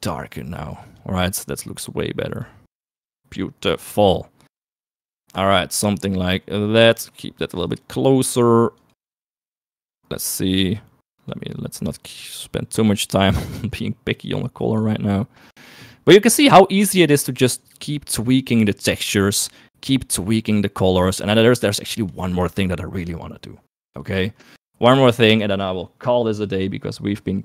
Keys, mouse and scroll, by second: 16.9 shift+middle click, 18.4 click, 21.8 shift+middle click, 24.1 middle click, 24.7 click, 27.2 click.